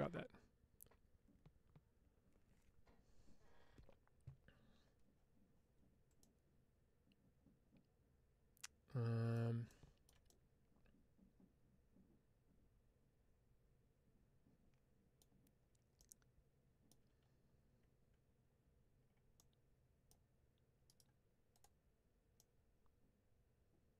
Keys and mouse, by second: 6.1-9.2 middle drag, 10.1-15.0 middle drag, 16.0 middle click, 18.3 Tab, 19.2-19.9 middle drag, 20.9 right click, 22.2-23.9 middle drag.